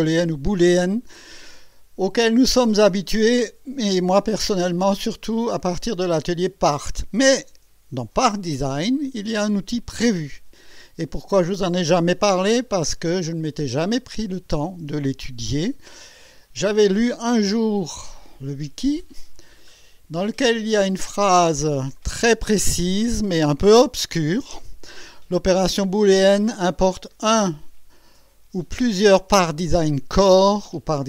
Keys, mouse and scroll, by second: 16.7 click, 17.9-20.4 scroll up 10.